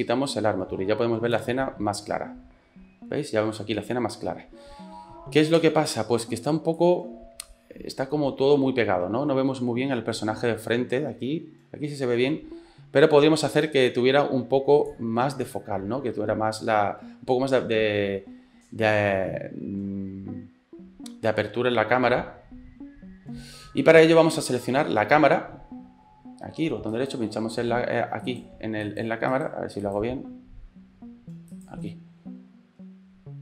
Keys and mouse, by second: 1.4 space, 5.6 space, 6.8-8.9 drag, 8.9-11.1 middle drag, 11.1-13.5 drag, 13.5-15.1 right drag, 27.1 right click, 28.4 right click, 29.4-33.4 right drag.